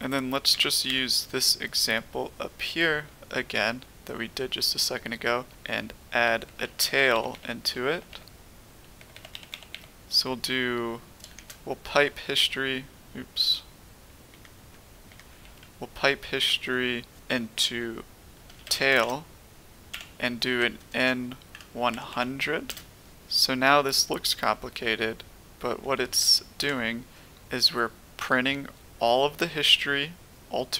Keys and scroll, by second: 0.8 Up, 5.5 Left, 5.5 Left, 5.6 Left, 5.8-8.1 Left, 10.2 Right, 11.2 typing, 11.9 Left, 11.9 Down, 14.2 Up, 14.6 Down, 15.0 Up, 15.4 Left, 15.9 Left, 16.1 Left, 18.3 Left, 18.5 Left, 18.7 Left, 19.9-22.6 typing, 24.8-25.3 typing, 25.3 Right, 25.5 Right.